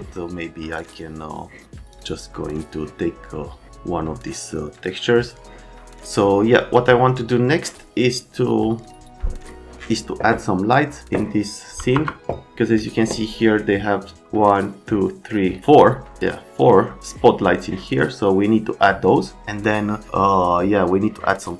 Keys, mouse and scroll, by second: 0.7 click, 4.7 click, 6.8 click, 7.1 click, 8.8 click, 11.0 click, 11.8 BackSpace, 11.9 BackSpace, 15.3 middle click, 15.5 middle click, 19.5 click.